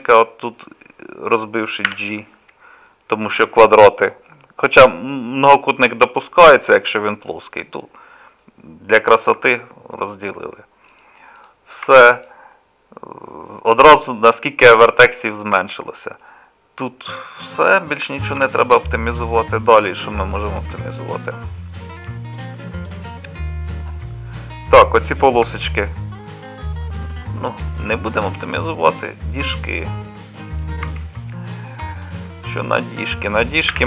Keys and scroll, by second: 1.9 j, 9.4 Tab, 11.9 Tab, 14.6 Tab, 16.2 Tab, 18.4 KP_Divide, 19.9 Tab, 21.1 KP_Divide, 25.5 Tab, 27.4 Tab, 30.9 Tab, 33.7 2.